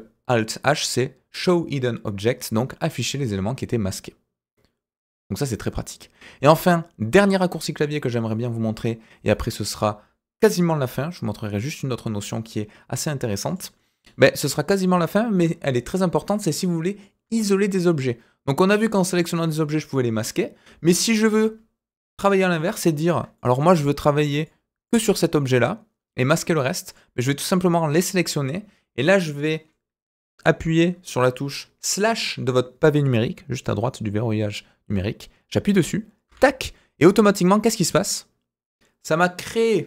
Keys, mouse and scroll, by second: 10.4 click, 13.5 click, 13.8-14.8 middle drag, 15.0-15.4 shift+middle drag, 16.2-17.0 middle drag, 17.4 shift+middle drag, 18.7-19.2 drag, 22.5 click, 23.3 shift+middle drag, 24.4 click, 26.8 click, 27.5-28.0 drag.